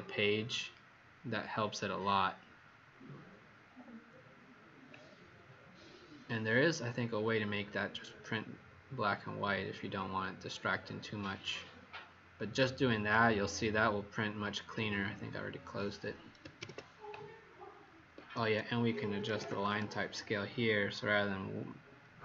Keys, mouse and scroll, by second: 16.5 ctrl+p, 18.1 Escape, 18.9-19.9 typing.